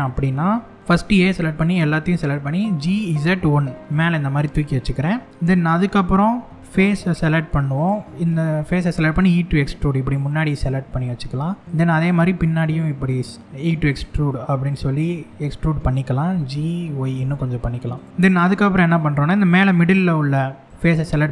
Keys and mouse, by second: 0.4-3.5 middle drag, 2.3 g, 3.5 click, 4.0-5.1 middle drag, 6.4 middle click, 6.8 3, 8.4 e, 10.1 click, 10.5 middle click, 11.6 click, 13.5 click, 13.9-15.1 middle drag, 15.9 g, 16.8 y, 17.6 click, 17.9 middle click, 20.5 click, 21.2 e.